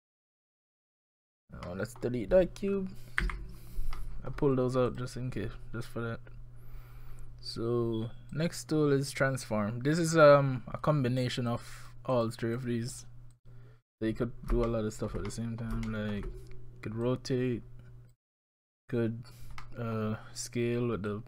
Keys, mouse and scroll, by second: 1.2-1.7 scroll down 4, 1.7 middle click, 3.2 Delete, 4.0 middle click, 4.9 click, 8.3 click, 11.5 click, 11.8 click, 12.1 click, 12.6 click, 12.9 click, 13.3 click, 14.7 shift+middle click, 15.2-15.7 scroll down 2, 15.3 middle click, 15.9 shift+middle click, 17.0 click, 19.6 middle click, 20.0 scroll down 1, 21.1 click.